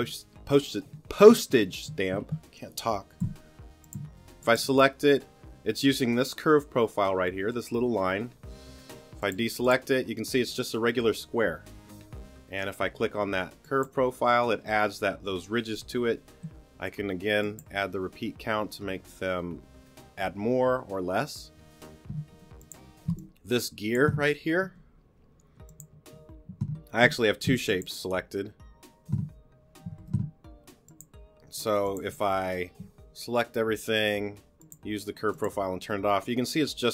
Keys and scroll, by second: 3.2 t, 22.3 t, 25.6 t, 27.0 t, 30.1 super+z.